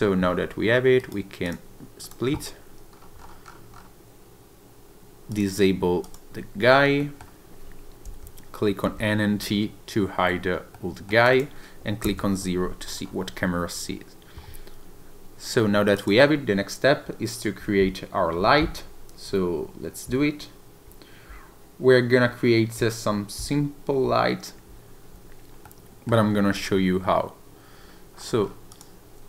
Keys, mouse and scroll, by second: 1.0 right click, 2.9-5.3 scroll down 6, 5.3 click, 6.0 click, 6.7 scroll down 2, 7.0 middle click, 8.0 n, 8.8 n, 9.3 t, 10.7 middle click, 11.2 click, 12.0 KP_0, 12.8 scroll down 2, 13.0-13.6 scroll up 1, 15.9 click, 25.6 middle click, 26.3 scroll down 1, 26.5 click, 27.8-28.8 scroll down 4, 28.9 click.